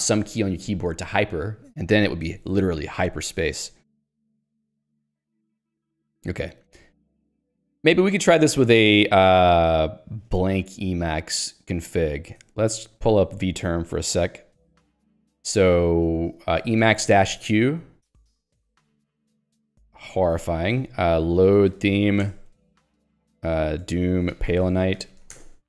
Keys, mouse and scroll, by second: 4.9 ctrl+g, 5.2 Escape, 5.3-6.8 typing, 8.7 Escape, 12.4-13.6 typing, 16.4-17.7 typing.